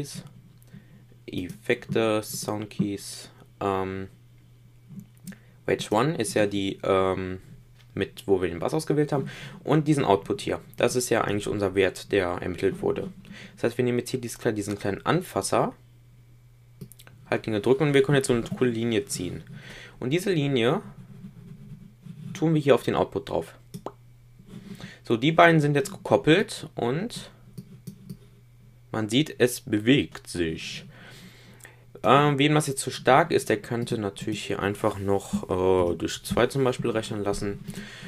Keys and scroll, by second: 35.7 shift+/.